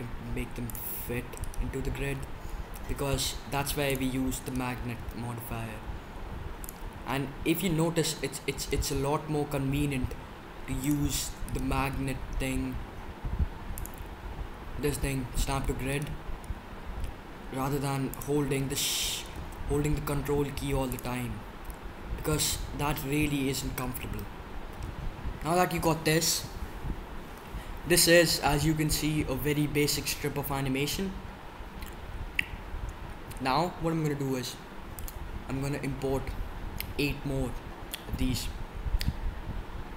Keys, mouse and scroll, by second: 1.4-3.2 drag, 2.0 s, 4.4-5.3 drag, 4.9 s, 6.2-7.5 drag, 8.9 s, 11.8 s, 16.4 s, 16.7-17.8 drag, 18.8-20.4 drag, 19.3 s, 21.3-21.9 drag, 34.9-36.9 drag.